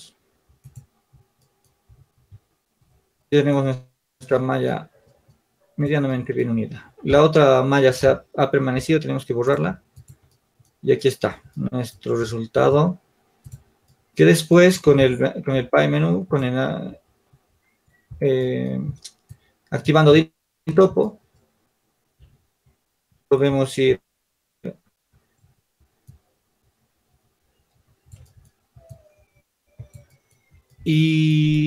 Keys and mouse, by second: 2.5 shift+z, 9.7 x, 12.5 Tab, 15.7 alt+w, 19.5-24.9 drag, 22.2 ctrl+z, 22.2 c, 26.3-28.0 drag.